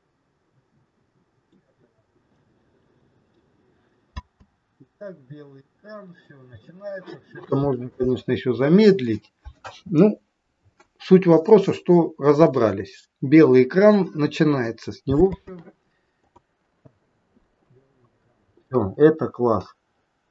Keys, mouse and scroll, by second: 2.8 click, 4.2 space, 15.3 space, 16.3 click, 17.9 scroll down 2, 18.6 middle click, 19.9 scroll down 3.